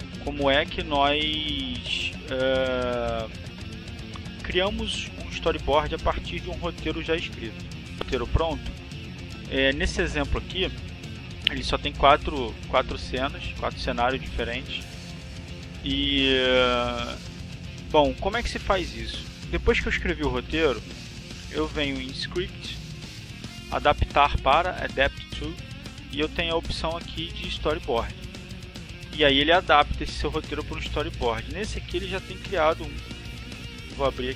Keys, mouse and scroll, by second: 1.0 click, 7.0 click, 7.9 click, 9.3 click, 20.5 click, 29.3 click, 31.3 click.